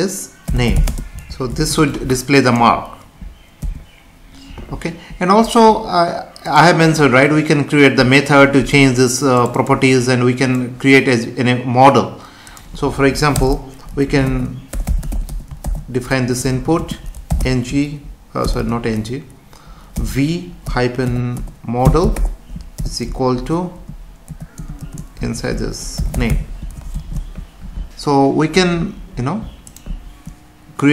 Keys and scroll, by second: 0.9 space, 1.5 ctrl+s, 3.6 F5, 13.3 Return, 16.5 Left, 16.8 space, 18.4 BackSpace, 25.3 Left, 26.9 ctrl+s.